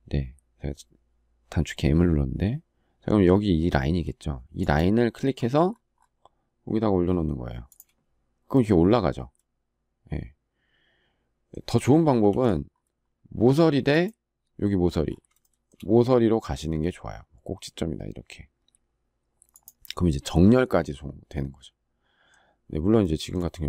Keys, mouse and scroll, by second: 12.0 ctrl+z, 15.1 shift+middle click.